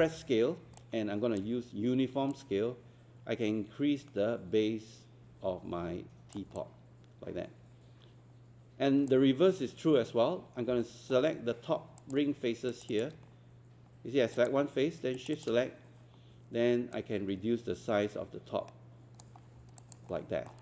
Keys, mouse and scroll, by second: 0.0 r, 0.8-9.1 alt+drag, 10.6 scroll up 1, 10.8 alt+middle click, 12.0 click, 12.7 shift+click, 12.9 shift+click, 14.4 click, 15.2 shift+click, 16.9-19.5 drag, 19.5 scroll down 1, 19.8 alt+click, 20.1 alt+middle click.